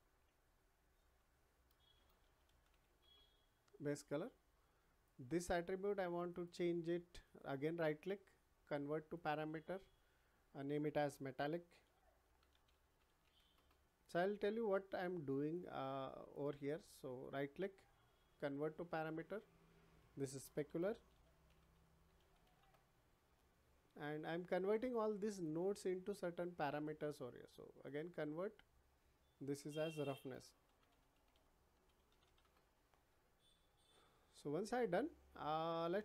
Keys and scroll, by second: 0.2 Left, 1.9 shift+b, 2.2 a, 3.0 Return, 11.2-13.2 typing, 13.5 Return, 20.6 shift+s, 21.0 p, 22.0 l, 22.2 a, 22.6 Return, 30.2 shift+r, 30.6 o, 32.4 Return.